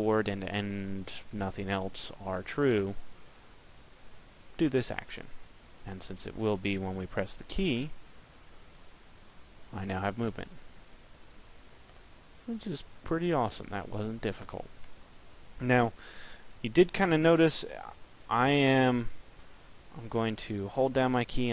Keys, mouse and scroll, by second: 7.5 p, 17.7 p.